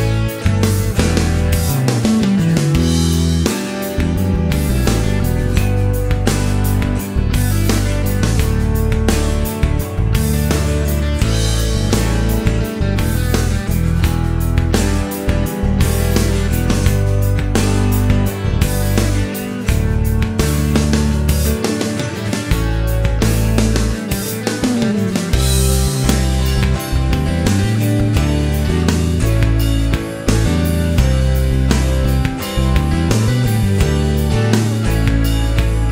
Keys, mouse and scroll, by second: 0.9 click, 1.9 click, 2.9-3.7 scroll down 2, 4.7 click, 7.0 click, 8.4 click, 9.4 c, 11.1 click, 11.9 click, 12.7 click, 14.0 click, 15.4 c, 16.0-16.4 scroll down 1, 16.7 middle click, 17.2 scroll up 1, 19.4-21.7 drag, 21.7 scroll down 1, 22.5-23.0 middle drag, 24.3 click, 25.6 click, 26.8 click, 28.3 click, 28.8-29.2 scroll up 1, 29.2 middle click, 29.6 scroll down 1, 29.8 middle click, 30.3 scroll up 1, 32.2 click, 32.7 scroll down 1, 32.8 middle click, 33.7 click, 35.7 click.